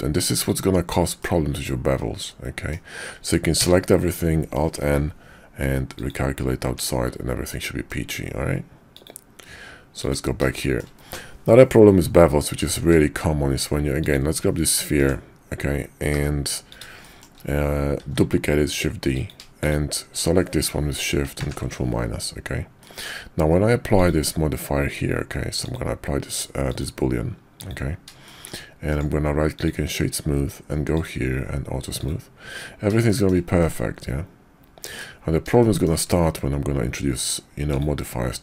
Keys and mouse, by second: 0.6 Tab, 1.2-2.7 drag, 2.7 middle click, 3.5 a, 4.8 alt+n, 6.6 Tab, 7.5-7.9 drag, 9.0-10.4 drag, 10.6 shift+drag, 12.7 shift+a, 15.0 f, 16.1 g, 17.0 shift+click, 18.0 shift+d, 21.4 ctrl+KP_Subtract, 22.8 drag, 25.6 click, 26.3 click, 26.7-27.7 drag, 28.2 shift+drag, 28.9 click, 32.0 click, 33.1 shift+middle drag, 33.6-35.0 middle drag, 35.6 shift+middle drag.